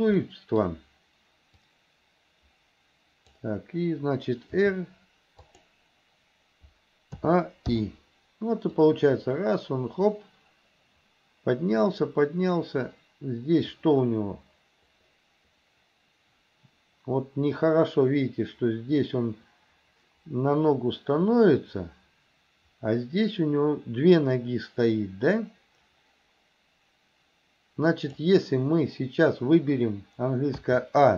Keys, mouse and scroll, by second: 0.3 middle click, 1.6 click, 1.8-3.5 drag, 4.5 r, 7.3 a, 7.8 i, 8.9-28.3 drag, 30.7 a.